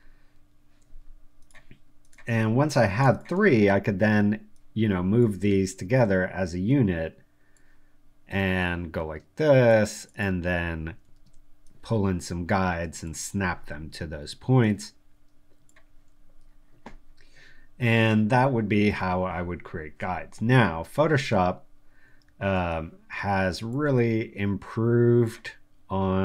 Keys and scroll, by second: 0.4 super+u, 5.6 super+t, 11.1 super+r, 22.2 super+t, 23.1 shift+super+t.